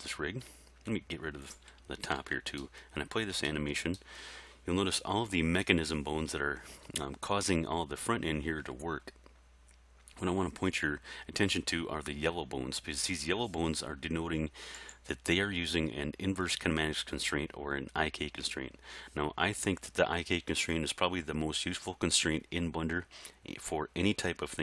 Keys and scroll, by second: 2.2 alt+a.